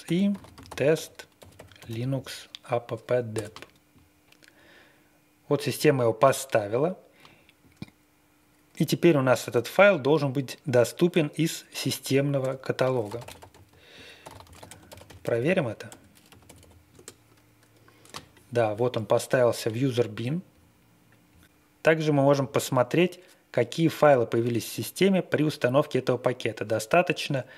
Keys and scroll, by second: 0.0-1.8 typing, 3.3 Return, 12.4 Return, 12.8-17.0 typing, 18.3-18.9 typing.